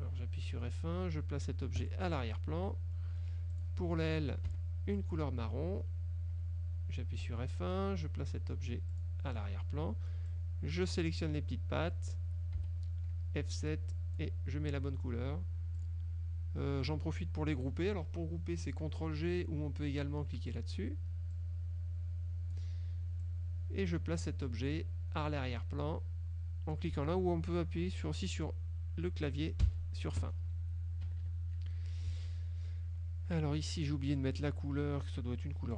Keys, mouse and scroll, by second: 1.9 click, 2.4-3.4 drag, 3.6 click, 4.6 F7, 5.1 click, 6.5 F1, 7.4 F1, 9.0 click, 10.4-11.3 drag, 12.7 F7, 14.0 click, 15.9 click, 20.6 click, 21.4 click, 23.3 click, 29.7 End, 31.1 KP_Subtract, 33.8 click.